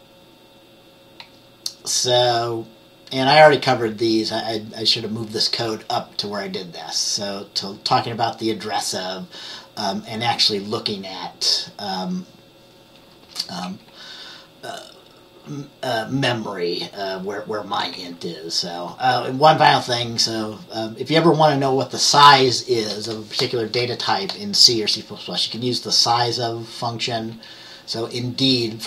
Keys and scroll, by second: 1.3 F10, 10.7 F10, 11.3 F10, 13.0 F10, 13.7 F10, 18.0 F10, 27.4 F10.